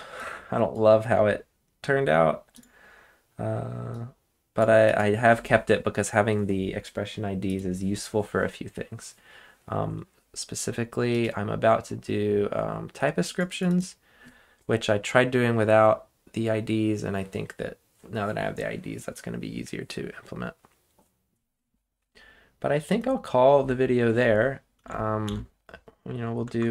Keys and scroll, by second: 25.2 ctrl+shift+k.